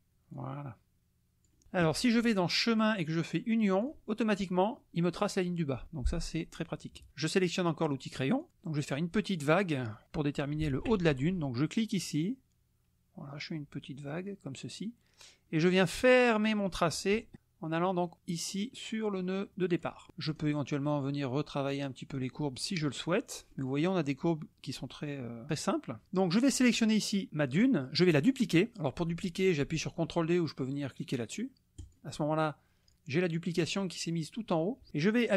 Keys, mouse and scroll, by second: 0.3-1.6 drag, 2.7 click, 3.8 click, 6.6 middle click, 8.4 click, 11.7-20.0 drag, 20.2 click, 21.7 click, 23.1-26.8 middle drag, 26.8 click, 31.8 click.